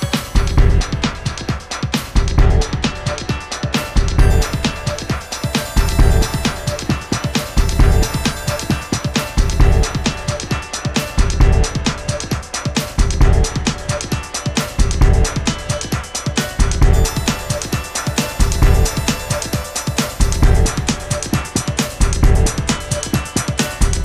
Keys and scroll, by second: 12.5 super+z, 16.2 BackSpace, 18.3 super+a.